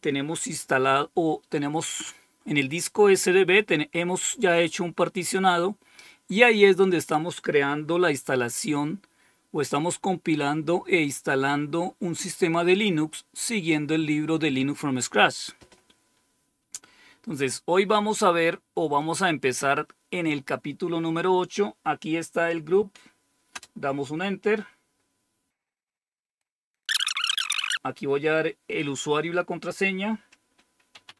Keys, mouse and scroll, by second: 18.9 click.